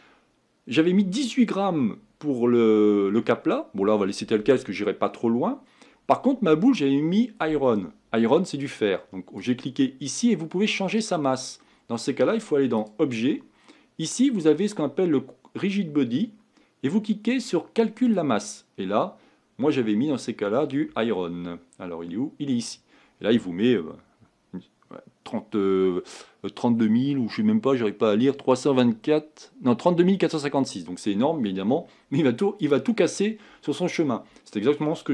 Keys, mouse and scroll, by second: 7.8-8.6 scroll down 1, 8.6-9.5 scroll down 4, 9.5 click, 22.7-35.1 drag.